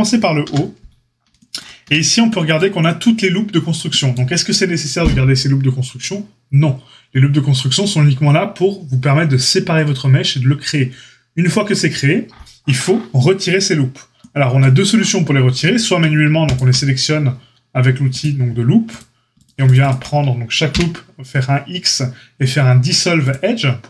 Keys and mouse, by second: 0.4 KP_Divide, 1.8 Tab, 16.4 alt+shift+click, 18.1-18.9 drag, 19.3 click, 19.4 alt+shift+middle click, 19.7 alt+shift+click, 19.8-23.8 alt+shift+middle drag, 20.6 x.